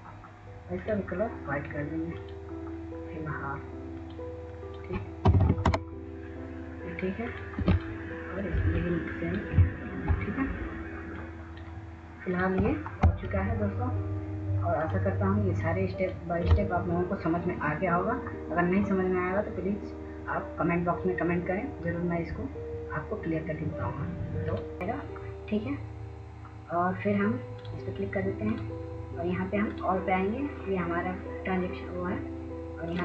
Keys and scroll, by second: 0.8 1, 1.9 BackSpace, 2.4 ., 2.6 Return, 9.0 1, 9.1 1, 9.4 Return, 16.8 ctrl+0.